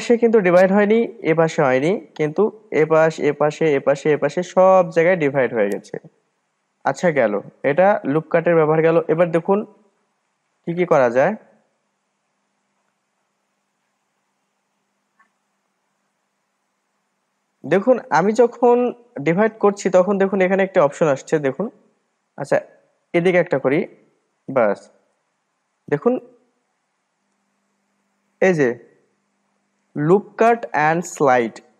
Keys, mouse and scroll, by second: 3.0 click, 3.4 click, 4.1 click, 4.4 click, 4.8-7.6 middle drag, 7.6 ctrl+z, 7.9 ctrl+z, 8.1 ctrl+z, 8.4 ctrl+z, 8.6 ctrl+z, 9.0 ctrl+z, 9.3 ctrl+z, 9.5 ctrl+z, 9.8 ctrl+z, 10.0 ctrl+z, 10.2 ctrl+z, 10.6 ctrl+z, 10.8-11.3 ctrl+z, 11.5 ctrl+z, 11.7 ctrl+z, 13.5-14.8 drag, 14.8-15.4 scroll down 1, 15.4-15.8 scroll up 1, 15.8-18.8 middle drag, 19.5-21.8 drag, 21.8-24.6 middle drag, 24.6-27.6 drag.